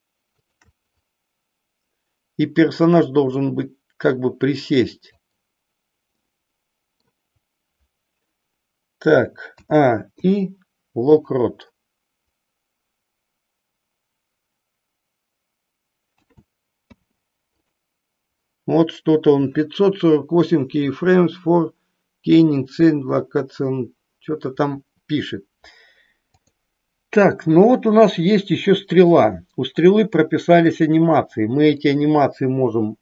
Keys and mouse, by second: 0.3-1.3 shift+drag, 2.9-5.2 drag, 6.2 middle click, 9.5 a, 10.2 i, 16.3 a, 16.8 i, 30.5-31.6 drag.